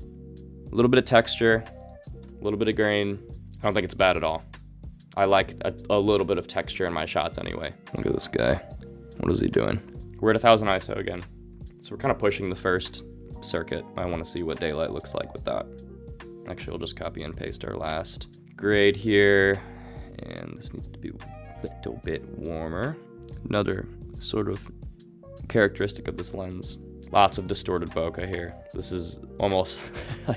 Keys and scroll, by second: 16.7 super+1.